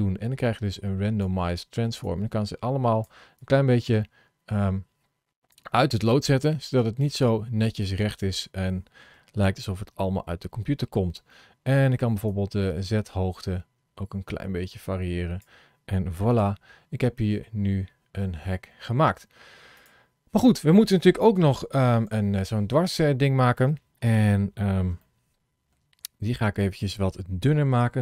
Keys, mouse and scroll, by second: 2.0 click, 3.3 click, 5.9 click, 12.1 click, 16.2 click, 16.9 middle click, 19.6 click, 21.2 KP_3, 22.0 KP_1, 24.0-24.4 scroll up 4, 24.9 shift+middle click, 25.6 shift+middle click.